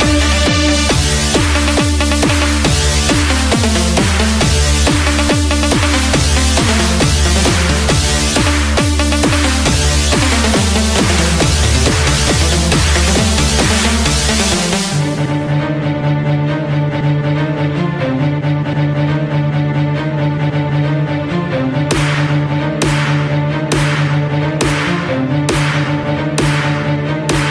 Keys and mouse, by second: 4.8 KP_Add, 14.8-18.8 right drag, 19.4 KP_Subtract, 20.8 KP_6, 22.1 KP_6, 26.8 KP_6.